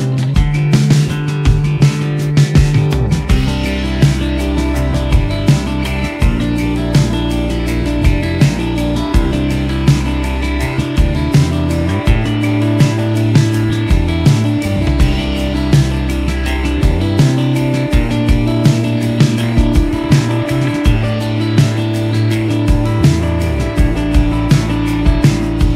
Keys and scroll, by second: 12.1 ctrl+z, 12.2 ctrl+z, 12.3 ctrl+z, 12.5 ctrl+z, 12.8 ctrl+z, 12.9 ctrl+z, 16.7 ctrl+z, 16.8 ctrl+z, 16.9 ctrl+z, 17.0 ctrl+z, 17.3-18.5 typing.